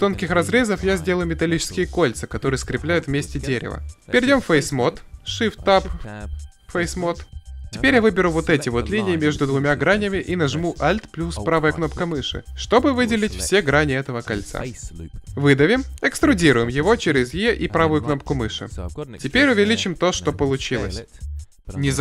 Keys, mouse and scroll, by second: 2.9 middle click, 3.7 ctrl+Tab, 15.7 e, 19.9 s.